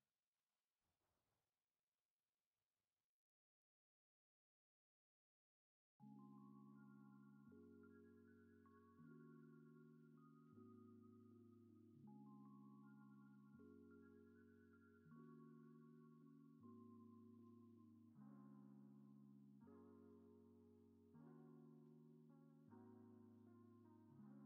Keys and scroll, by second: 0.7 ctrl+v, 12.9 ctrl+c, 19.0 ctrl+s, 20.6 alt+x, 23.3 ctrl+s, 23.9 space.